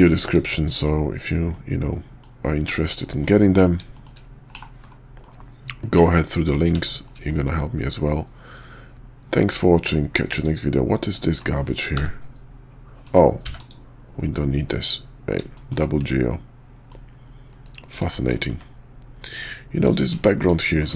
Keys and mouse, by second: 1.5 middle click, 1.7-2.2 drag, 3.0 middle drag, 3.9 shift+middle click, 4.5 /, 5.2-5.8 middle drag, 5.9 /, 6.8 shift+middle drag, 7.3 middle drag, 7.5 click, 8.2-8.8 middle drag, 8.8 click, 8.9-9.9 middle drag, 10.3 click, 11.9 g, 13.4 x, 14.6 KP_5, 15.5 shift+middle drag, 16.3-16.9 middle drag, 17.5 KP_5, 18.1 shift+middle click, 18.5 `, 19.8 click, 20.2 shift+middle drag.